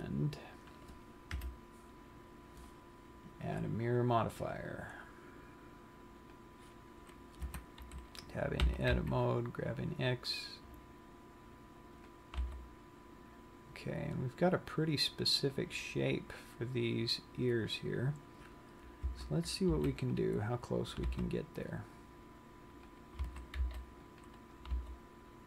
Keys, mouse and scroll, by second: 1.2 click, 1.9 KP_1, 4.0 click, 7.9 Tab, 9.0 g, 12.6 click, 12.6 g, 15.9 click, 16.4-19.1 scroll up 5, 19.7 a, 20.3 c, 21.2 right click, 21.4 g, 23.3 click, 23.6 a, 24.0 c, 25.1 right click.